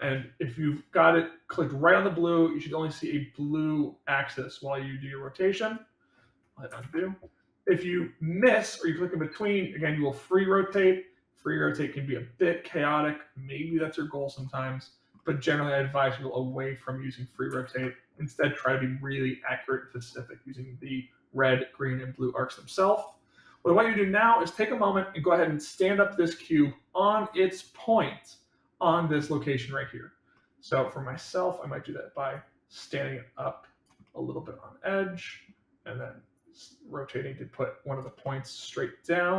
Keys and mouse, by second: 6.8 ctrl+z, 9.4-14.3 drag, 15.1-17.3 middle drag, 17.6 ctrl+z, 24.4-25.2 middle drag, 30.4-30.9 middle drag, 32.3-33.8 drag, 34.0-35.5 middle drag, 36.5-38.0 drag, 38.2-39.3 middle drag.